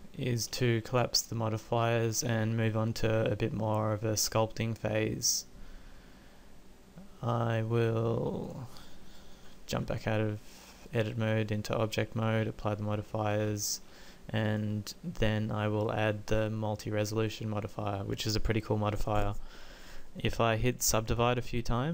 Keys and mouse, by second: 3.4-4.4 middle drag, 5.4-8.9 middle drag, 9.8 Tab, 12.1 middle click.